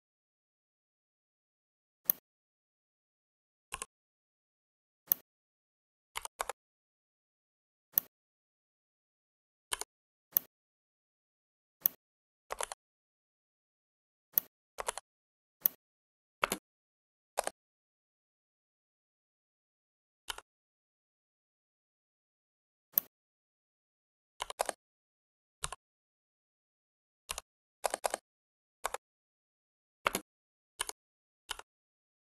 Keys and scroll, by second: 6.0 5, 6.2 Return, 14.8 ctrl+z, 16.4 space, 24.3 9, 24.5 0, 25.5 ;, 27.2 2, 27.7 0, 28.7 Return, 29.9 space.